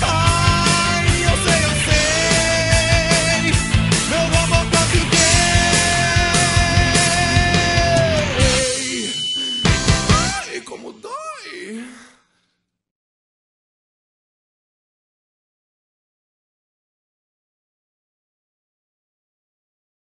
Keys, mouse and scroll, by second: 0.1 alt+a, 5.9 middle click, 8.8-9.4 scroll down 1, 9.4-11.0 scroll down 1, 14.2 alt+a.